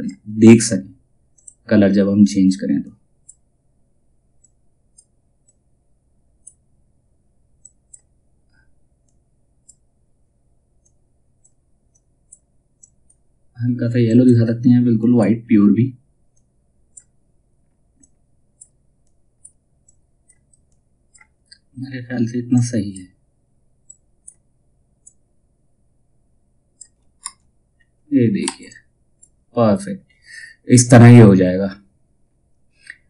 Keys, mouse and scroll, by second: 26.7 space, 27.9 F2, 28.2-33.0 drag.